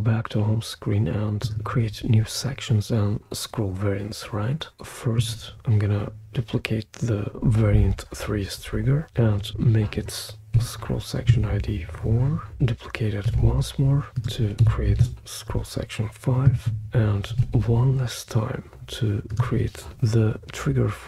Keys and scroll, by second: 10.5 4, 11.3 Return, 13.3 super+d, 14.6 5, 15.0 Return, 17.3 super+d.